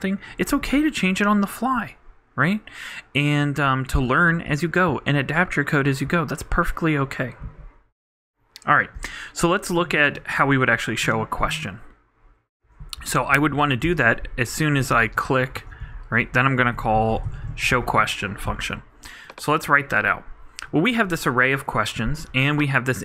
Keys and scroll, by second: 13.5 super+Up, 13.6 super+Right, 13.8 super+Return, 15.2-18.2 typing.